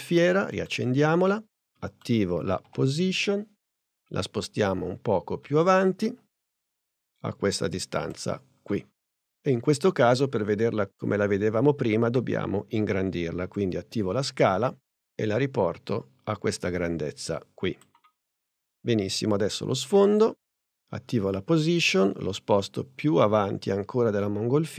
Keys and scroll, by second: 2.6 p, 12.1 s, 21.4 p.